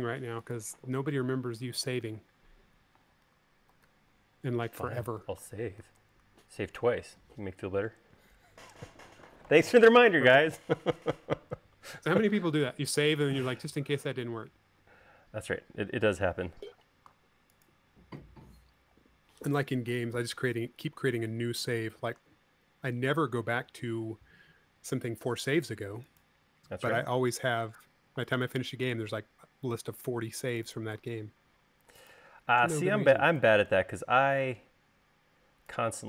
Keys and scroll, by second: 4.6 super+s, 6.9 super+s, 14.4 v, 17.5 m, 21.4 space, 31.9 v.